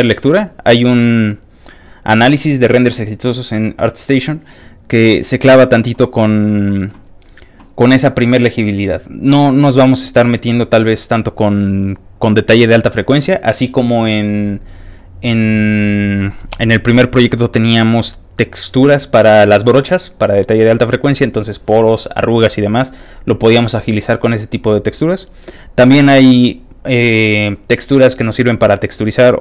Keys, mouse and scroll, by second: 0.6 scroll up 2, 0.8-1.4 scroll down 3, 4.1-5.1 middle drag, 5.1 click, 13.9-15.6 scroll down 1, 16.4 click, 16.7-19.3 scroll down 1.